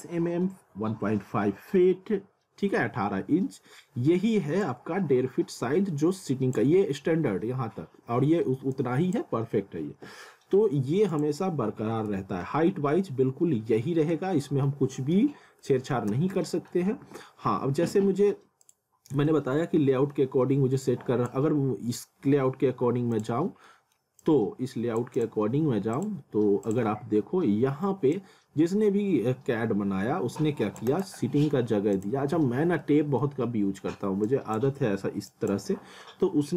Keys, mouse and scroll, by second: 4.6 click, 8.0 scroll down 1, 8.7 click, 11.6 alt+w, 12.1 z, 12.4 middle click, 14.1 z, 14.7 middle click, 15.4 scroll down 1, 15.7 middle click, 16.1 z, 16.4 alt+middle click, 16.9 w, 18.6 click, 19.2 z, 19.6 scroll down 1, 19.9 middle click, 20.8 click, 23.7 middle click, 24.2 click, 30.9 right click, 31.9 click, 32.8 middle click, 34.3 click, 34.8 z, 35.3 click.